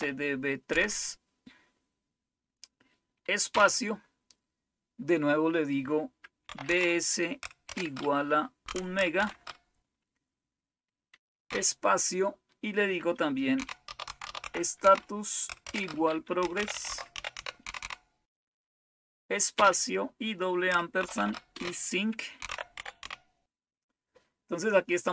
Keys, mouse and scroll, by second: 0.0-0.7 typing, 3.5 space, 6.2-9.1 typing, 11.6 typing, 13.3-18.2 typing, 19.5 typing, 20.9-23.4 typing.